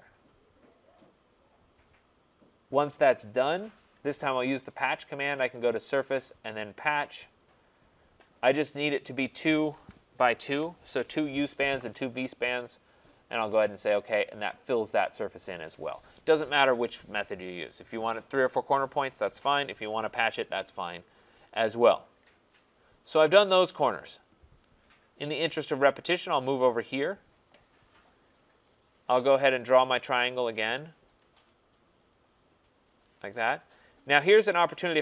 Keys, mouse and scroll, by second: 2.8 right click, 3.5 Return, 5.5 click, 7.5 click, 9.7 2, 10.3 Tab, 10.5 2, 13.0 click, 14.1 middle click, 15.5 right click, 20.4-21.8 scroll, 22.2 scroll down 8, 22.5 right click, 24.2-24.5 scroll down 2, 24.9-26.3 scroll up 17, 26.3-27.6 scroll, 28.8 click, 30.2 click, 31.1 click, 32.1 click, 33.0 click, 34.0 click.